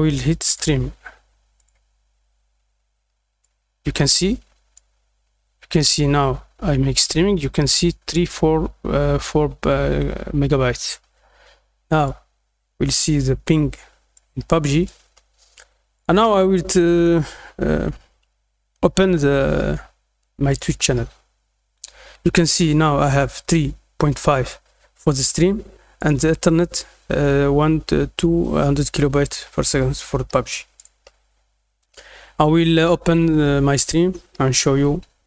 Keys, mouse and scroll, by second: 0.4 click, 1.5 click, 3.4-4.7 drag, 12.0-14.1 drag, 15.9 click, 20.4 click, 25.9 click, 30.7 click.